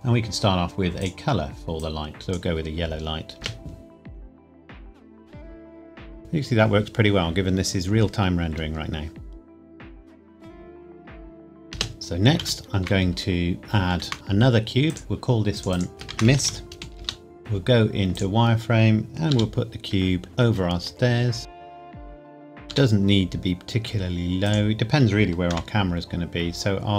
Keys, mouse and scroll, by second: 3.4 space, 11.7 space, 11.9 ctrl+s, 12.3-12.9 scroll down 1, 12.9 shift+a, 13.6 click, 13.9 shift+a, 14.9 click, 16.3-17.4 typing, 17.0 Return, 18.2 click, 19.3 g, 20.3 click, 20.5 s, 21.5 click, 22.1 KP_1, 22.3 scroll down 1, 22.7 g, 24.5 click, 25.5 KP_0, 26.3-26.9 scroll down 1.